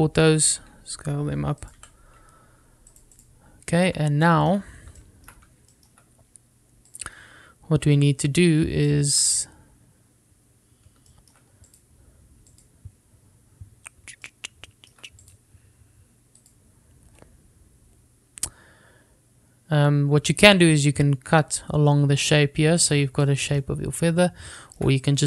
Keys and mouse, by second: 1.6 s, 2.7 click, 2.9 g, 4.0 click, 4.3 click, 5.4 middle drag, 6.1-6.4 shift+middle drag, 6.8 shift+middle drag, 8.9 drag, 10.0 shift+middle click, 10.5 click, 12.2 shift+middle drag, 13.7 click, 15.4-16.0 shift+middle drag, 16.3 click, 24.3 shift+middle click.